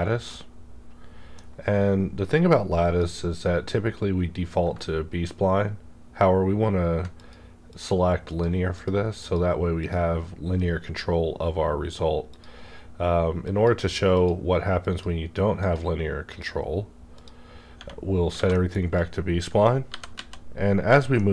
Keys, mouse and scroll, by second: 0.3 middle click, 0.3-4.9 middle drag, 0.3-2.8 drag, 4.9-5.7 ctrl+scroll up 2, 5.9 ctrl+scroll down 1, 6.1 ctrl+scroll up 1, 7.2 click, 7.7 click, 12.3 click, 16.4 click, 18.0 scroll down 1, 18.3 alt+a, 18.5-18.9 middle drag, 18.9 click, 19.7 scroll up 1, 20.9 click, 20.9 z, 21.1 middle click.